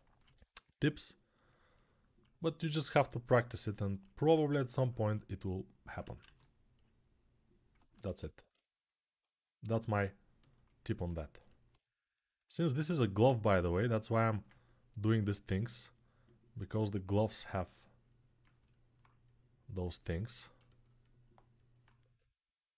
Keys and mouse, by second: 5.8 ctrl+z, 6.0 ctrl+z, 18.3 alt+right click, 18.7-22.7 drag.